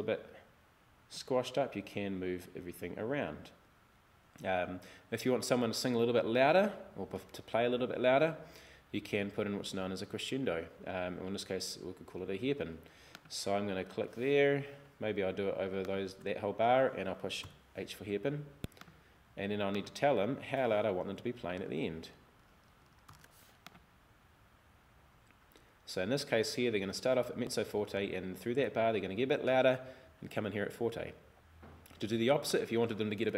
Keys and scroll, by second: 17.5 h, 21.7 super+e, 23.1 super+f, 33.2 BackSpace.